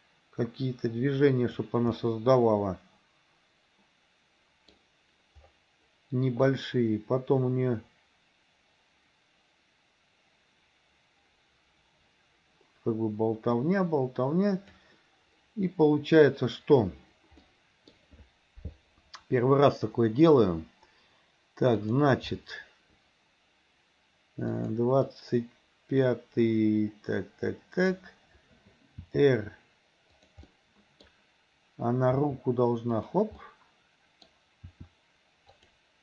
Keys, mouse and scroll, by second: 2.0-4.8 middle drag, 6.6-14.9 drag, 17.6 middle click, 21.9 click, 24.6 click, 25.2-28.1 drag, 29.1 r, 30.6 middle click, 32.2 r, 33.4-34.4 middle drag, 34.7 r.